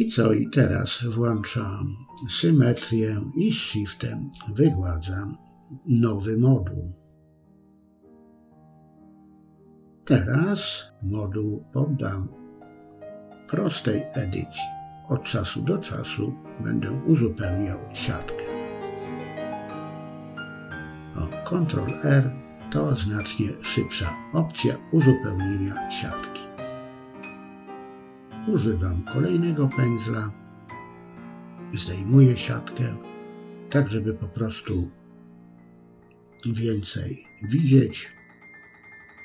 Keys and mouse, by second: 1.7 click, 2.8 shift+click, 3.1 shift+click, 3.3 shift+click, 4.8 shift+click, 7.0 middle click, 8.3 KP_3, 9.8 click, 11.0 click, 11.5 click, 13.1-15.0 drag, 15.8 middle click, 16.2 shift+click, 16.4 shift+click, 16.6 middle click, 17.1 KP_1, 17.7 KP_3, 18.1 shift+middle click, 18.9 click, 19.6 middle click, 20.5 ctrl+r, 21.2 KP_1, 22.3 click, 23.4 click, 23.8 middle click, 25.6 click, 26.0 click, 26.3 click, 26.6 middle click, 27.7 middle click, 28.4 middle click, 29.6-30.9 drag, 31.0 shift+middle click, 32.0 middle click, 32.4 middle click, 33.8 middle click, 34.5 click, 34.9 click, 35.3 click, 35.6 middle click, 36.0 shift+click, 36.2 shift+click, 36.5 shift+click, 36.8 shift+click, 37.1 shift+click, 37.5 middle click, 38.0 middle click, 38.2 shift+middle click.